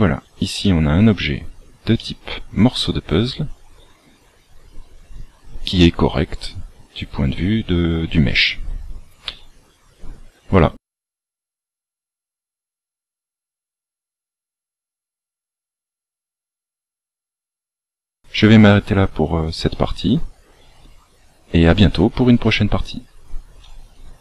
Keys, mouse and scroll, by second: 0.5 shift+middle click, 1.2 scroll down 1, 1.9 middle click, 9.9 scroll down 1.